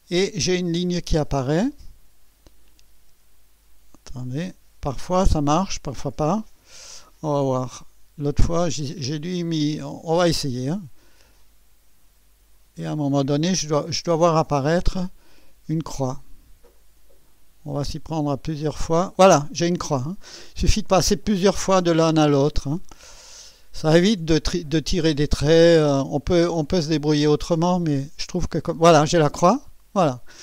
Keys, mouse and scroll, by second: 7.3 scroll up 1, 19.9 click, 20.6-21.0 scroll down 1, 21.3 right click, 22.2 scroll up 1, 22.8-23.6 right drag, 29.3 click, 30.0-30.4 scroll down 1.